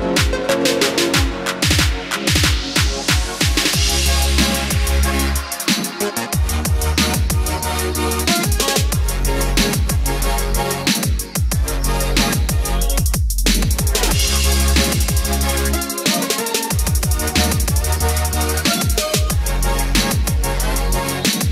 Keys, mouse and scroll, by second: 18.2 middle click, 19.4-19.7 scroll down 1, 19.7 middle click, 20.7-21.3 scroll up 1.